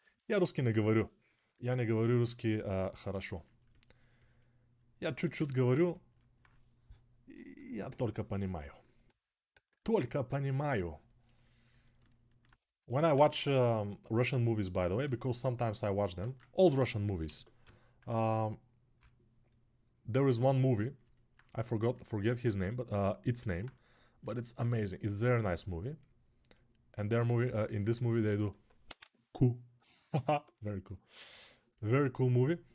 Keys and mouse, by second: 1.5 ctrl+alt+right click, 3.9-12.8 drag, 5.0 alt+q, 12.9 ctrl+z, 14.9 alt+q, 16.1 ctrl+Tab, 17.0 g, 17.4-20.8 ], 24.0-32.7 drag.